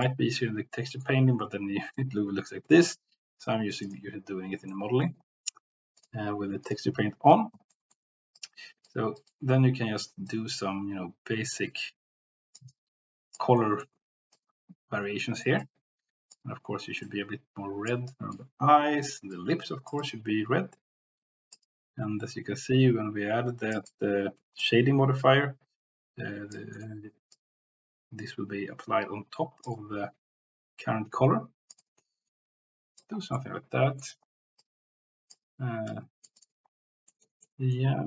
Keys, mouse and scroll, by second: 0.6 middle click, 3.8 click, 4.6 middle click, 6.1 click, 7.7 middle click, 8.4 click, 9.2 click, 10.2-11.6 drag, 12.7 click, 13.6 middle click, 14.3-15.4 drag, 15.6 click, 17.0 click, 18.4 click, 19.3-21.5 drag, 21.7-23.7 drag, 23.8 click, 25.1-26.5 drag, 26.7 middle click, 27.3-29.6 drag, 29.7-31.7 drag, 33.3 middle click, 34.6 click, 35.8 click, 36.4 click, 37.1 middle click, 37.5 middle click.